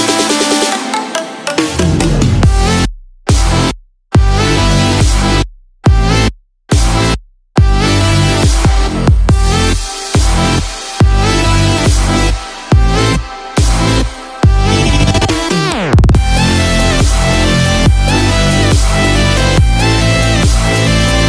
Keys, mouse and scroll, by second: 1.6 click, 1.6-5.1 scroll down 1, 8.6-8.9 scroll down 3, 9.2-9.5 scroll up 1, 13.1 click.